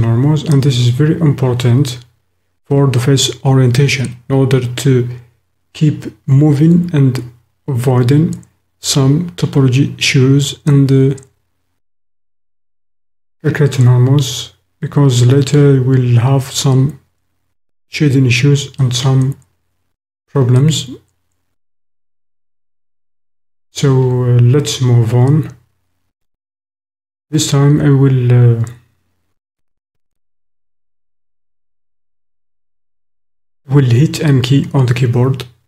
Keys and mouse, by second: 33.0 m.